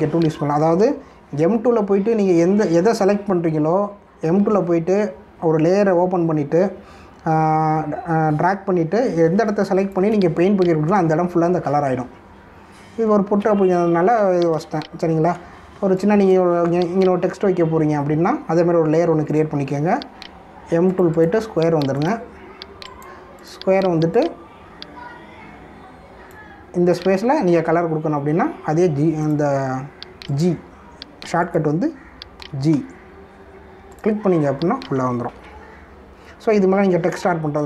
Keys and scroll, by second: 2.1 ctrl+-, 10.3 space, 14.5 space, 15.8 ctrl+-, 16.7 space, 33.3 g, 36.3 ctrl+d.